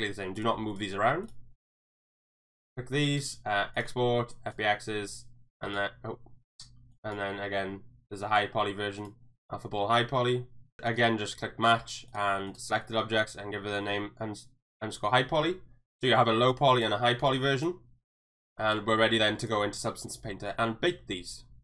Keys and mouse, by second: 0.3 click, 0.7 click, 1.7 click, 3.2-4.6 drag.